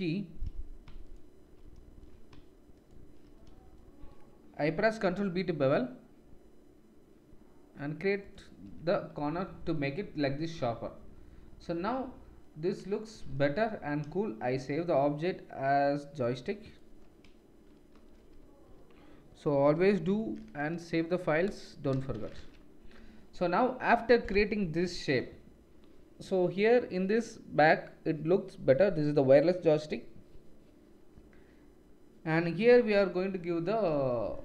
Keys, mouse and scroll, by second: 1.1-8.7 alt+shift+drag, 5.0 ctrl+b, 8.7 Tab, 8.7-14.1 middle drag, 13.2 ctrl+s.